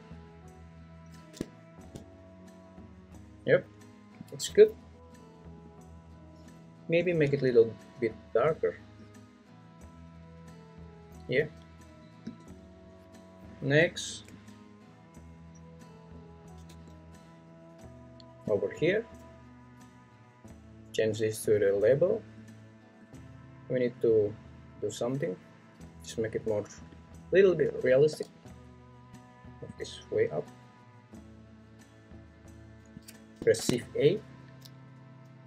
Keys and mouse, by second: 4.1 `, 12.2 `, 14.3 `, 15.7 click, 16.7 `, 26.9-29.3 drag, 28.1 g, 29.7 click, 33.0 click, 33.6 shift+a.